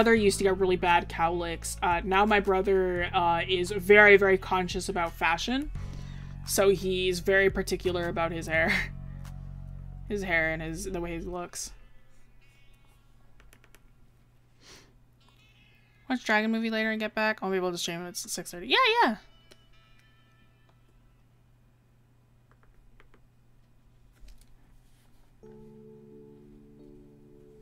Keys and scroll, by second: 2.1 ctrl+z.